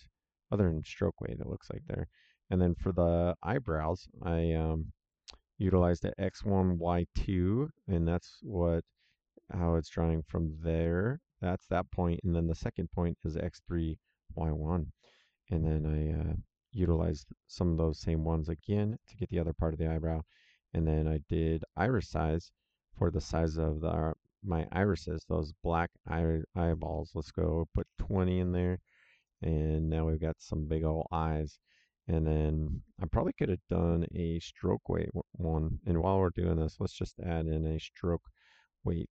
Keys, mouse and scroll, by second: 5.6 click, 17.0 click, 18.8 click, 21.5 click, 23.0 click, 26.0 click, 27.7 KP_2, 27.8 KP_0, 29.1 click, 39.0 click.